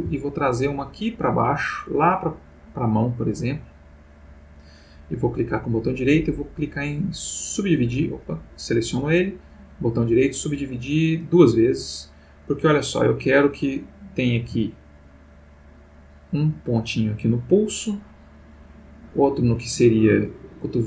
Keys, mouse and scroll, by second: 4.2 click, 5.3 right click, 6.0 click, 7.5 click, 8.2 click, 9.5 right click, 10.0 click, 11.2 click, 13.2 click, 14.4 g, 15.9 click, 17.3 click, 17.6 g, 18.2 click, 19.0 click, 19.4 g, 20.4 click.